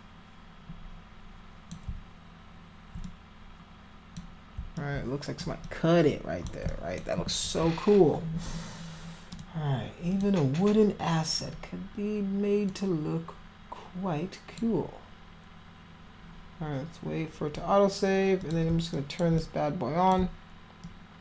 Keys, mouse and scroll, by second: 3.0-4.1 drag, 4.7 alt+click, 5.6 click, 6.6 alt+click, 9.3 click, 10.1 click, 12.6-14.5 drag, 18.4 click, 18.9 alt+click, 19.3 click, 20.8 alt+click.